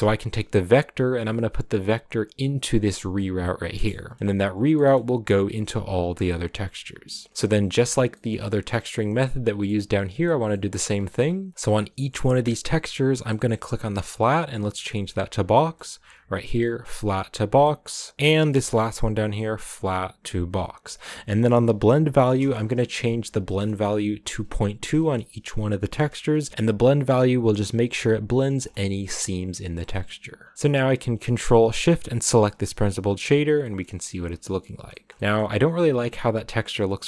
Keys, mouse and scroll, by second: 3.9 middle click, 4.3-4.7 scroll up 3, 4.7-15.1 middle drag, 15.1 click, 15.6-19.2 middle drag, 19.2-32.8 drag, 33.7-35.0 shift+middle drag, 35.0 scroll up 2, 35.1 shift+middle click, 35.9-36.5 scroll up 1, 36.5-37.0 scroll up 1.